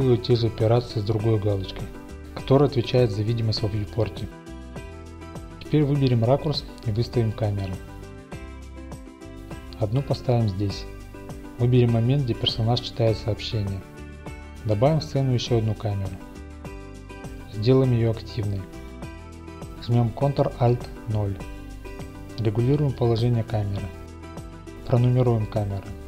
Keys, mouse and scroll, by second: 1.4 click, 1.7 i, 2.7 click, 4.1 click, 5.7-6.1 scroll up 2, 6.1 middle click, 6.5 click, 6.7 a, 7.4-9.1 drag, 7.9 ctrl+a, 8.9 g, 9.0 g, 9.6-10.6 drag, 10.6 middle click, 11.4 click, 12.1-14.1 middle drag, 12.9-14.1 typing, 14.5-16.1 drag, 18.4-22.1 drag, 21.1 ctrl+a, 22.2 click, 22.4-22.7 typing, 23.0 click, 24.4-25.4 drag, 24.7 1, 25.4 BackSpace, 25.5 BackSpace.